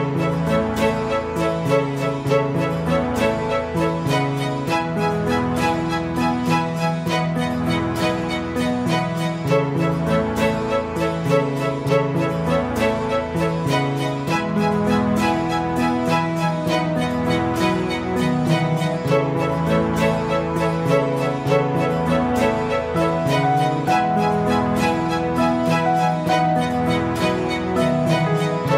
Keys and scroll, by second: 6.5 Escape, 11.6 F5, 13.9 Escape, 17.3 Escape, 20.7 Escape, 25.5 F5.